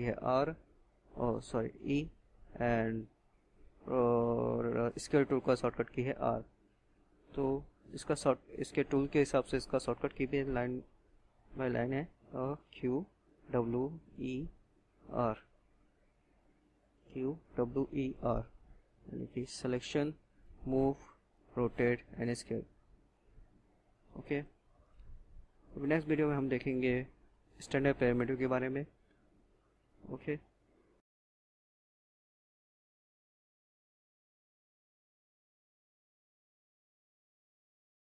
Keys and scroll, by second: 0.3 e, 3.9-5.8 typing, 8.4-14.1 typing, 15.2-17.7 typing.